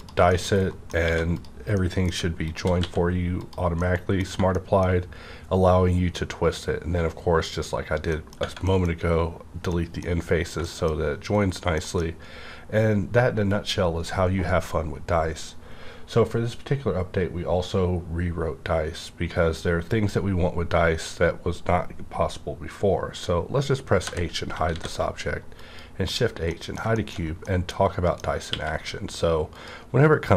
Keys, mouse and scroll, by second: 0.0 3, 0.3 middle click, 1.0 3, 1.3 click, 1.8 middle click, 1.8 middle click, 2.8 x, 3.7 middle click, 8.1 middle click, 8.4 Tab, 8.4 Right, 9.6 middle click, 9.8 scroll down 1, 10.4 scroll down 1, 10.6 middle click, 11.4 scroll down 1, 11.7 middle click, 24.1 middle click, 24.1-24.7 typing, 25.5 click, 26.1 scroll up 1, 26.5 middle click, 27.0 shift+middle click, 27.2 shift+scroll down 1, 27.4-29.5 middle drag, 28.5 q, 29.5 click.